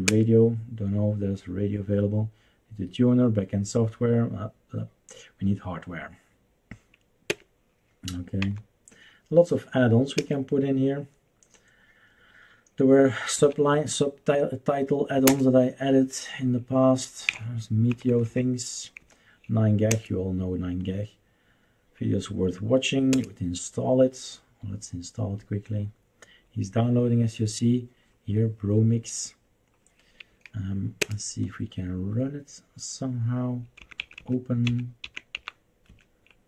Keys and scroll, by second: 0.0 Return, 7.3 Return, 8.4 Down, 10.2 Return, 13.4 Right, 15.2 Return, 17.4 Down, 17.9 Down, 18.1 Down, 18.2 Down, 19.0 Down, 19.9 Return, 23.1 Return, 31.0 Return, 33.8 Left, 33.9 Left, 34.1 Left, 34.6 Left, 35.0 Left, 35.3 Up, 35.8 Escape.